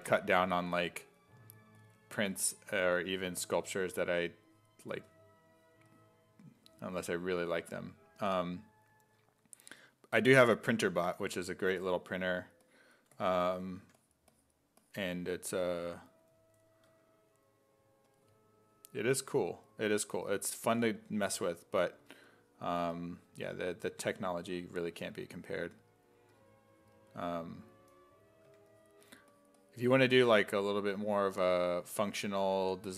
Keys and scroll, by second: 2.3 s, 2.9 s, 4.1 s, 5.0 s, 9.8 s, 10.3 s, 11.2 1, 13.8 1, 16.9 `, 20.2 s, 20.6 s, 22.0 s, 28.5 1, 30.8 1, 31.9-32.9 typing.